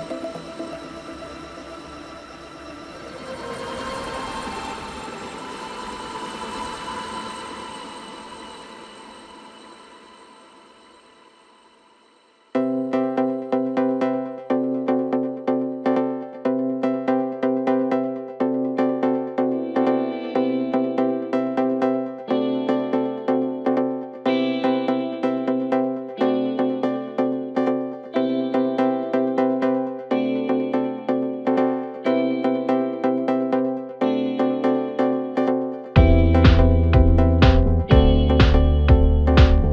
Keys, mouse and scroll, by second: 0.1 click, 0.6-1.3 scroll up 2, 1.3 s, 4.5 KP_1, 6.5-7.2 drag, 7.2-8.1 scroll down 2, 8.1-8.8 scroll up 1, 8.8 g, 12.3 s, 14.5 g, 19.4 KP_Decimal, 20.2-20.8 scroll up 1, 20.8 Tab, 21.9-22.7 scroll up 1, 22.7 s, 27.0 scroll down 4, 27.2 Tab, 28.0 click, 29.3 click, 29.7-30.2 scroll up 1, 30.2 shift+click, 30.6-31.3 scroll up 2, 31.3 ctrl+j, 33.2 click, 33.6-34.4 scroll down 3, 34.4-35.3 drag, 35.7-36.1 scroll up 2, 36.1 Tab, 36.6 middle click, 37.2-38.2 scroll up 2, 38.2 shift+click, 38.4 shift+click, 38.8-39.3 scroll down 4, 39.3-39.7 right drag.